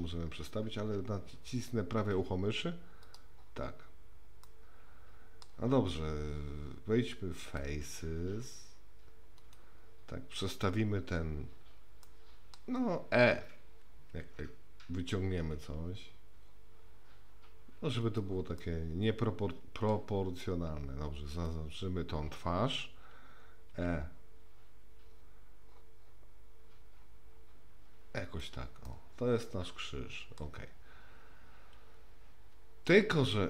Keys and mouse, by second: 4.5 middle click, 7.4 click, 9.5 click, 12.0 middle click, 14.1 e, 18.6-19.9 middle drag, 21.3 click, 23.7 e, 28.8-30.4 middle drag.